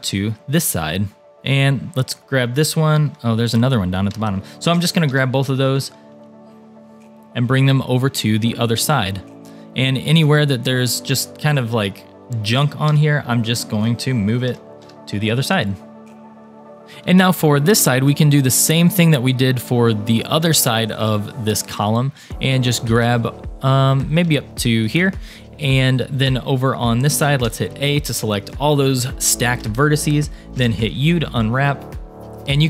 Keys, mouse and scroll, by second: 1.7 click, 3.7 shift+click, 4.7 g, 5.1 x, 6.3 g, 8.8 click, 9.6 click, 10.2 shift+click, 12.5 g, 12.9 x, 14.1 a, 14.5 g, 16.8 middle click, 16.8 scroll up 1, 17.7 click, 18.3 shift+click, 18.9 shift+click, 20.3 shift+click, 20.6 shift+click, 21.9 shift+click, 22.3 shift+click, 22.8 shift+click, 23.3 shift+middle click, 23.6 shift+click, 24.6 shift+click, 25.1-25.6 scroll down 2, 25.6 middle click, 27.5 a, 28.0-28.4 scroll up 3, 28.9-31.7 shift+middle drag, 30.6 u, 32.4-32.6 scroll down 3.